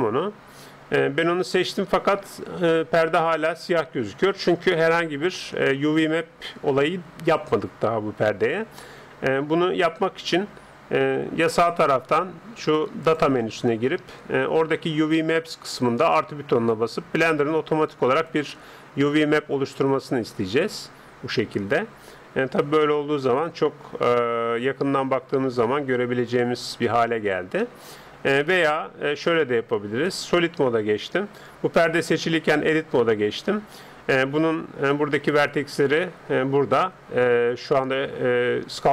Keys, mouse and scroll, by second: 0.0-1.9 drag, 13.1-14.9 drag, 14.5-18.2 middle drag, 14.5 right click, 18.2-19.9 drag, 21.0-23.5 middle drag, 24.1 middle click, 24.3-27.2 middle drag, 27.6-29.3 middle drag, 29.3-31.1 drag, 32.1 Tab, 32.9 middle click, 33.6-35.3 scroll down 1, 38.5-38.9 middle drag.